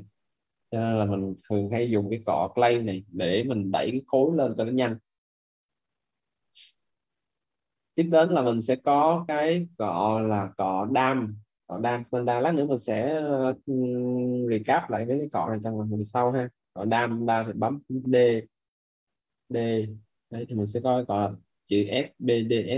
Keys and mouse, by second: 0.3 right click, 17.9 b, 19.4 d, 22.4 click.